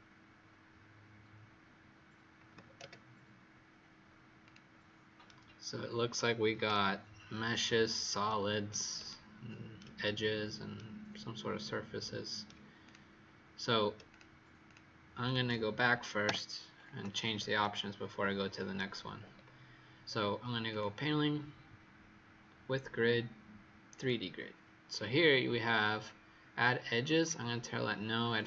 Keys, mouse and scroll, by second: 2.3 KP_8, 2.4 KP_0, 2.7 Return, 4.4 click, 5.2 right click, 8.2 right click, 9.0 shift+right click, 12.7 click, 14.6 shift+click, 16.2 Delete, 17.5 shift+right click, 19.3-20.6 scroll up 1, 20.6 click.